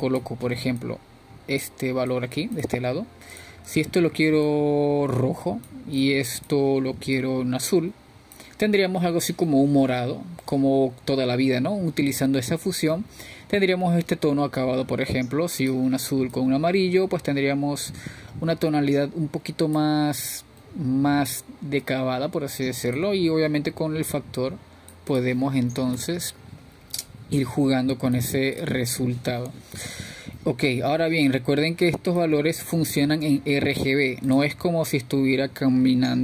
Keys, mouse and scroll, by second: 1.2 shift+a, 4.1-5.0 drag, 5.3 click, 5.8 drag, 12.8-15.1 middle drag, 15.1-19.4 scroll up 2, 19.6 click, 23.9-26.3 middle drag, 26.3-31.5 drag, 33.2-35.4 scroll up 4, 35.4-36.2 drag.